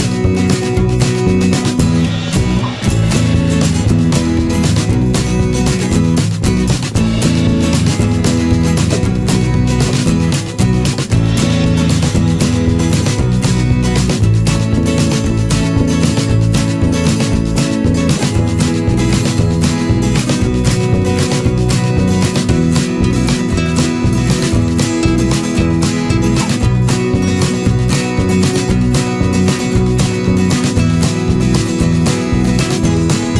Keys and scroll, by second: 11.7 ctrl+=, 27.3 ctrl+0, 28.8 ctrl+space.